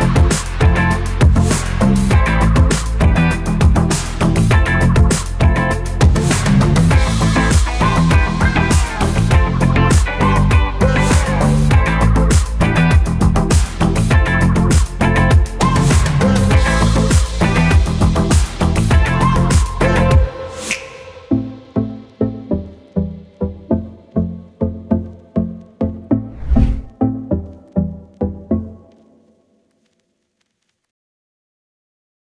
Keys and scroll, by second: 17.6 ctrl+a, 18.0 BackSpace, 18.6 ctrl+v.